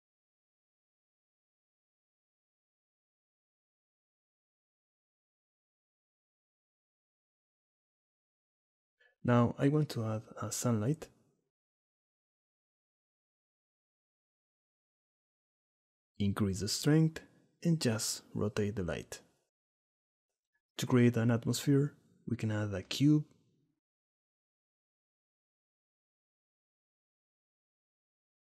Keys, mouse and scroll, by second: 2.7 click, 3.6 click, 4.8-6.1 drag, 6.5 click, 7.1 click, 8.4 middle click, 8.9 shift+a, 13.1 g, 13.8-14.9 drag, 16.0 click, 17.0 r, 18.2 middle click, 19.4-21.0 shift+middle drag, 22.1 shift+a, 25.0 middle click, 25.0 s.